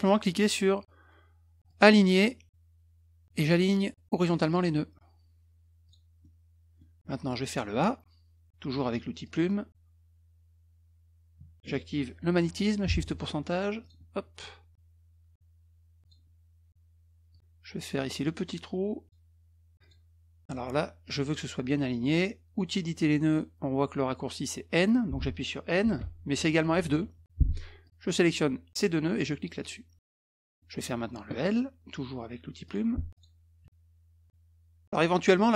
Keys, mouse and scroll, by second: 1.7 click, 4.5 click, 5.8 click, 6.2 middle click, 7.1 middle click, 9.2 click, 12.9 shift+ù, 13.8 click, 16.0 click, 17.3 click, 19.8 click, 26.0 n, 27.8 click, 29.6 click, 30.2 click, 32.6 click, 33.1 click.